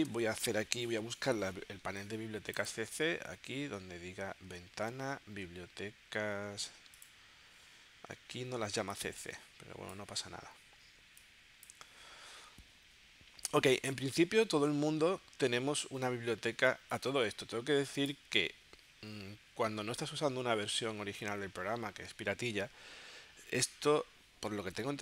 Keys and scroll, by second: 0.2 v.